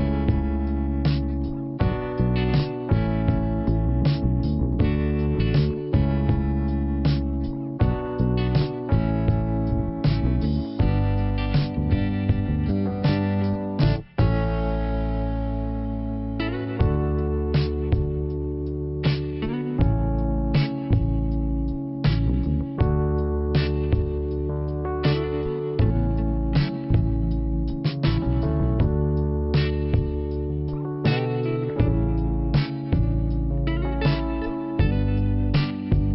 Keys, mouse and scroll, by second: 0.6 scroll up 1, 1.2 click, 3.3 click, 4.6 click, 6.3 click, 7.3 click, 9.9 click, 10.7 click, 12.8 click, 14.2 click, 16.2 click, 20.1 click, 20.5 scroll down 1, 22.3 scroll down 2, 23.2-23.5 scroll up 2, 23.5 click, 25.9 click, 26.9 click, 32.1 click, 33.5 click.